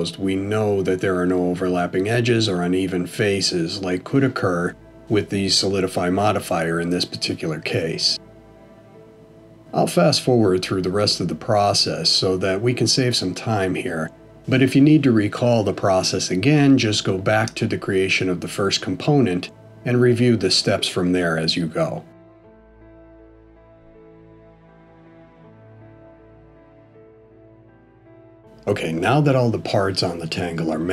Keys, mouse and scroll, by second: 0.9 middle click, 2.5 click, 3.6 click, 6.4 f, 7.3 middle click, 8.6 a, 11.1 ctrl+e, 14.2 middle click, 18.1 alt+h, 19.6 click, 20.3 middle click, 22.6-27.9 typing, 22.7 middle click, 22.8 click, 23.0 shift+click, 23.0 middle click, 23.2 click, 23.5 shift+click, 23.5 click, 23.6 click, 24.1 alt+h, 24.1 click, 24.3 middle click, 24.5 middle click, 24.5 click, 24.8 shift+click, 24.9 middle click, 25.0 shift+click, 25.2 click, 25.8 ctrl+e, 26.0 alt+h, 26.0 middle click, 26.1 middle click, 26.1 click, 26.5 middle click, 26.6 click, 26.7 shift+click, 27.0 middle click, 27.0 shift+click, 27.4 click, 27.5 shift+click, 27.6 click, 27.7 click, 27.9 ctrl+e, 28.1 alt+h, 28.2 middle click, 28.3 click.